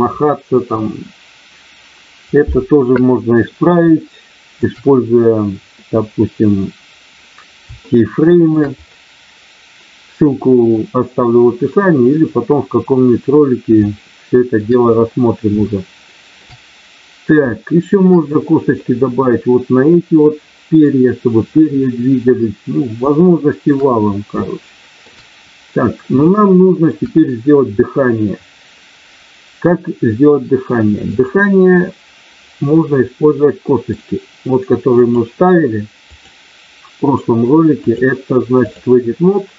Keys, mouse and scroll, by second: 4.0 shift+middle click, 8.0 shift+middle click, 14.0 shift+middle click, 15.5 shift+middle click, 17.5 shift+middle click, 23.0 shift+middle click, 24.3 shift+middle click, 26.2 shift+middle click, 31.1 click, 33.0 middle click, 35.0 click, 36.0 click, 37.9 click.